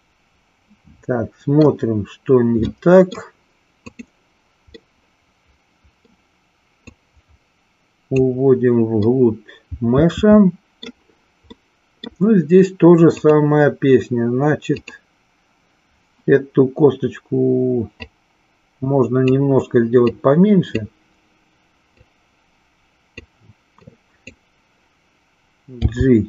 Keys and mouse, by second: 2.6 middle click, 3.9 click, 4.7-6.1 middle drag, 7.0-8.2 drag, 9.0-11.0 middle drag, 11.5 middle click, 13.1 click, 14.6 click, 17.9-19.4 drag, 20.1 click, 22.0-23.1 drag, 23.9 click, 25.7 g.